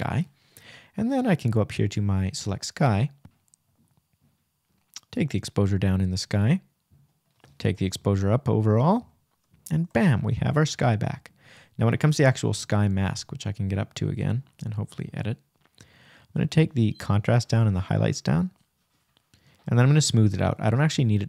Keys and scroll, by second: 0.5 shift+=, 3.2 shift+-.